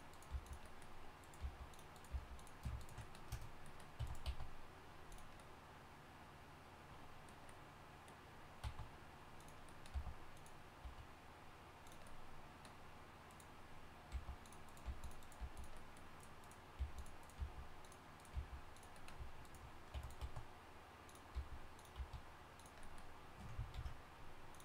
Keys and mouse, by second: 0.3 g, 1.4 g, 2.1 g, 4.0 e, 4.2 s, 8.6 s, 9.9 g, 10.8 s, 11.8 click, 11.8 right click, 13.3 click, 14.1 g, 14.8 g, 15.4 g, 16.8 g, 17.4 g, 18.3 g, 19.9 e, 20.2 s, 21.3 g, 21.9 s, 23.7 ctrl+f.